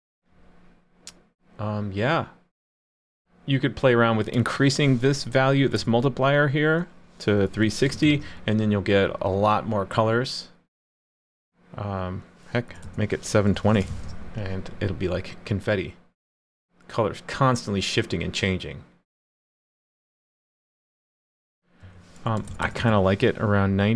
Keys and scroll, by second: 8.0 super+s, 13.9 super+s.